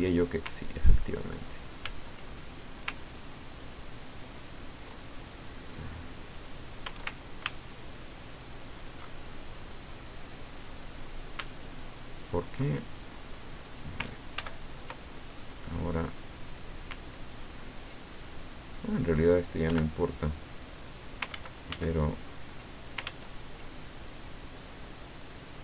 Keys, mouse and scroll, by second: 1.8 ctrl+z, 2.9 ctrl+click, 4.0 ctrl+click, 5.2 ctrl+click, 6.3 click, 7.6 ctrl+shift+click, 9.8 shift+click, 11.5 ctrl+shift+click, 12.8 ctrl+shift+click, 14.3 ctrl+shift+g, 15.7 click, 18.4 click, 19.7 Delete, 21.3 ctrl+z, 23.0 ctrl+z.